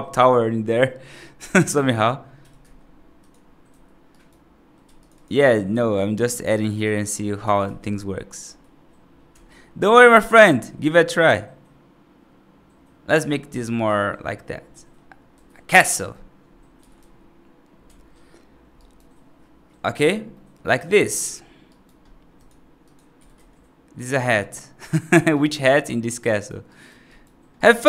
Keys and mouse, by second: 1.3-1.8 right drag, 2.2 g, 3.6 F3, 4.0 right click, 4.7 1, 4.8 click, 5.0 click, 5.6 2, 6.5 click, 6.6 click, 7.3 g, 10.3 s, 13.1 right click, 14.6 middle click, 15.2 F2, 16.6 s, 18.6 right click, 20.2 middle drag, 20.6 right click, 21.6 right drag, 22.2 click, 23.0 s, 24.0 g, 25.5 right drag, 26.1 right drag, 26.5 right drag, 26.9 right drag, 27.4 right drag.